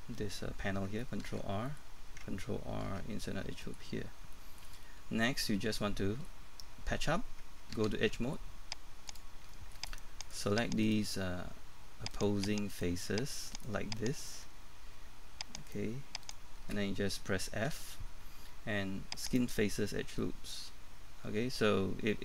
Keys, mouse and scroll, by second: 1.7 middle click, 3.6 middle click, 4.0 scroll down 1, 4.8 middle click, 7.8 ctrl+Tab, 9.1 click, 9.5 shift+middle click, 10.2 right click, 10.8 shift+right click, 12.7 shift+right click, 14.2 shift+right click, 15.6 shift+right click, 17.7 shift+f, 19.2 click, 20.2 middle click.